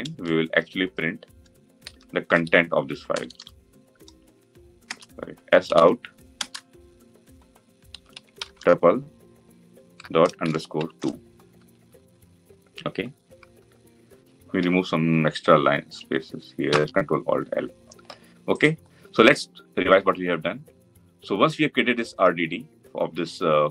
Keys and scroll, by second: 6.1 Return, 9.4 Return, 14.3 ctrl+y, 16.4 ctrl+alt+l.